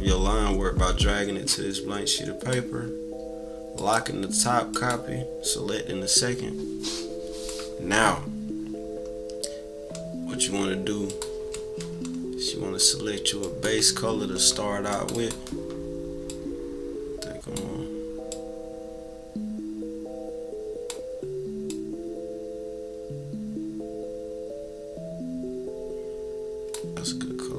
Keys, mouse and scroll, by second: 3.7 click, 4.6 click, 11.0 click, 13.4-15.4 drag, 16.3-17.5 drag, 18.3-20.8 drag, 21.6-26.7 drag.